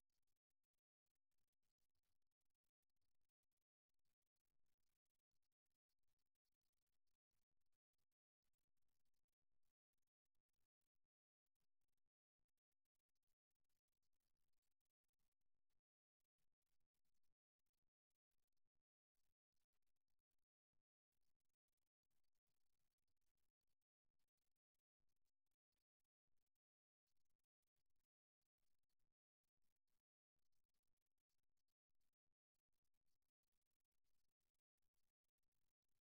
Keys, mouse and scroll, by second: 4.5 g, 9.9 e, 14.8 e, 15.9 e, 25.7 KP_1, 27.8-28.9 middle drag, 29.1-30.9 right drag.